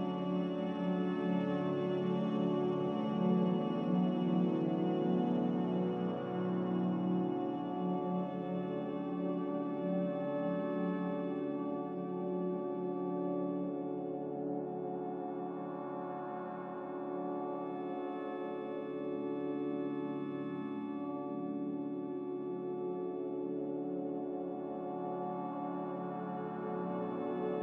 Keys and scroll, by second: 3.0 Delete, 4.3 r, 5.5 r, 7.6 a, 11.9 4, 12.5 BackSpace, 12.8 3, 13.2 Return, 17.6 ctrl+c, 17.9 ctrl+v, 20.8 ctrl+v, 26.2 ctrl+v.